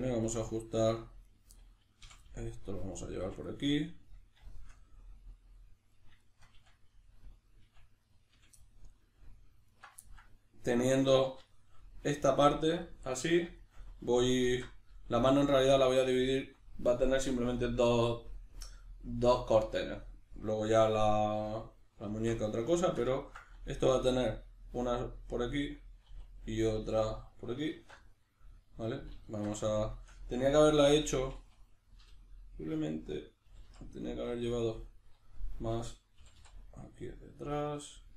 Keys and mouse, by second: 1.2 right click, 1.6-3.0 middle drag, 2.0 f, 3.0 right click, 3.2 f, 3.5-5.9 middle drag, 5.9 right click, 6.2 shift+right click, 6.6 f, 7.2 right click, 7.6 f, 8.0 right click, 8.3 f, 8.6-9.7 middle drag, 9.7 alt+right click, 10.0-25.5 ctrl+middle drag, 14.4 alt+q, 23.8 e, 25.5 click, 26.1 e, 27.1 click, 27.7 alt+q, 29.8-34.6 shift+middle drag, 32.0 l, 34.6 right click, 36.2 g, 37.8 click.